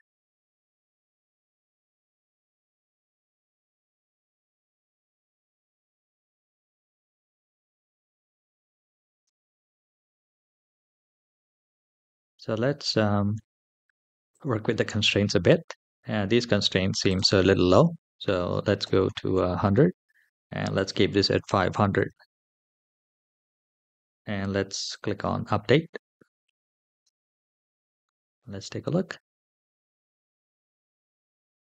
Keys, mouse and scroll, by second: 7.1 space, 8.0-8.9 scroll down 4, 8.9 space, 11.1 scroll up 2, 14.1 click, 14.7-16.8 scroll down 3, 16.8 scroll down 1, 16.8-19.2 drag, 19.0 KP_0, 21.6-23.1 drag, 21.6 KP_0, 23.8-24.7 scroll down 2, 24.7 click, 24.7 scroll down 1, 26.8 space.